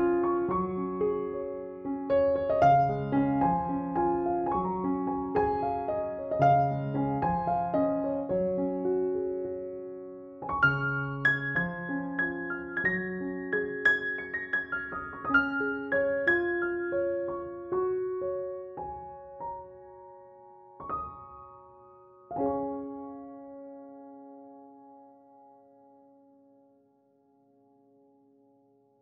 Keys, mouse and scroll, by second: 3.8 ctrl+=, 4.6 space, 4.8-5.3 click, 5.1 space, 7.1 alt+t, 8.1 click, 11.1 ctrl+=, 12.2 space, 12.3 click, 12.6-13.1 space, 13.3 ], 13.9-14.6 click, 14.5-15.8 typing, 15.2-15.7 click, 16.4 ctrl+z, 16.8-17.4 click, 17.5-18.4 click, 18.9-19.6 click, 19.5-23.6 typing, 20.3-20.8 click, 21.4-22.1 click, 23.1-23.7 click, 23.9-24.7 drag, 25.2 ], 25.4 ], 25.6 ], 26.1-26.9 drag, 27.6 ctrl+=, 28.1 [, 28.3 [, 28.4 [, 28.6 [.